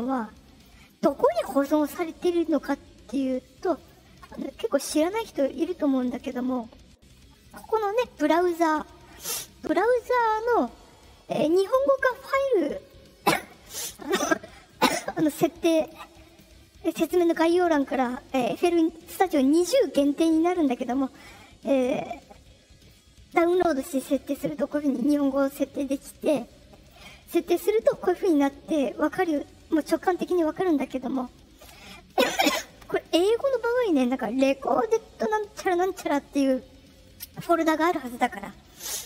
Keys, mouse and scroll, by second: 3.7 click, 4.7 click, 6.1 click, 14.6 click, 16.2 click, 24.2 click, 25.2 click, 26.7 click.